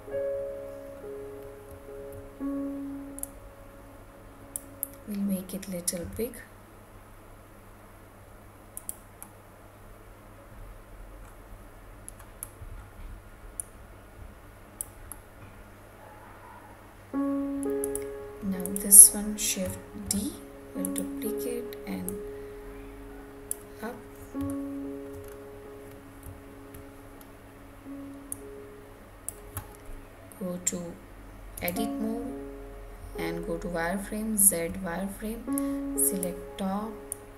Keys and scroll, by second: 31.6 Tab.